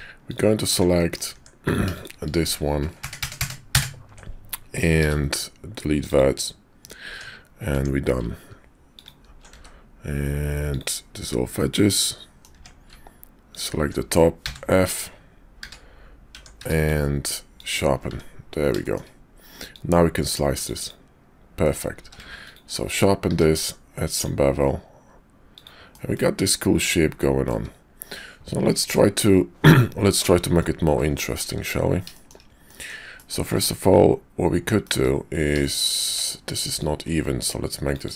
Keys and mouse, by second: 0.1 alt+click, 0.9 click, 1.4 Tab, 1.6 click, 1.9 shift+click, 3.0 ctrl+KP_Add, 4.9 x, 7.1 Tab, 7.7 Tab, 8.9 alt+click, 9.4 x, 11.5 middle click, 12.0 click, 12.5 Tab, 14.4 f, 14.9 Tab, 15.6 q, 16.3 Tab, 16.6 q, 18.1 `, 18.8 shift+click, 19.7-20.9 drag, 21.6 middle click, 22.0 q, 23.3 q, 25.9-27.5 middle drag, 30.5 middle click, 32.1 shift+middle click, 32.6 middle click, 33.1 middle click, 33.5 Tab, 34.8 `, 35.6 shift+click, 36.0 Tab, 36.7-38.1 drag.